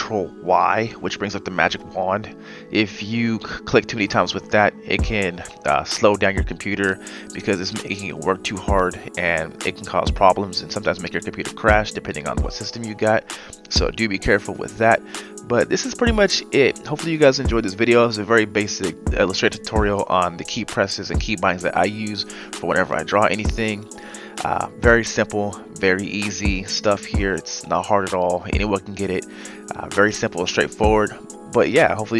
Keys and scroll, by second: 7.1 ctrl+z.